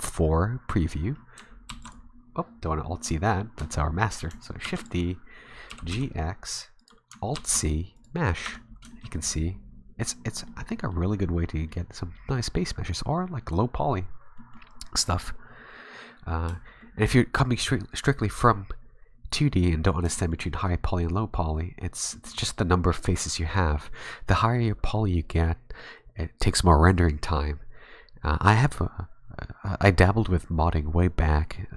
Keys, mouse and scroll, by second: 1.7 alt+c, 4.6 shift+d, 4.7 a, 4.8 s, 5.7 g, 7.3 alt+c, 8.4 Tab, 8.9 shift+middle click, 9.1 middle click, 10.8 middle click, 11.6 middle click, 12.3 middle click, 14.4 middle click, 16.8 shift+middle click, 20.2 shift+middle click, 22.1 middle click.